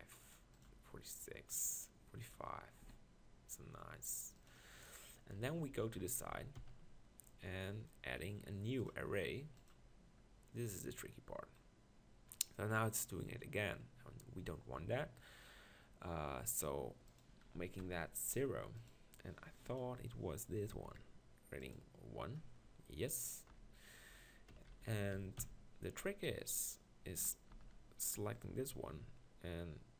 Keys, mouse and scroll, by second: 2.8 s, 5.4 KP_1, 5.7-6.6 KP_4, 22.5 middle click, 23.5 KP_1, 24.5-25.1 KP_4, 25.4 KP_4, 26.0 Tab, 27.5 ctrl+l, 28.9 r.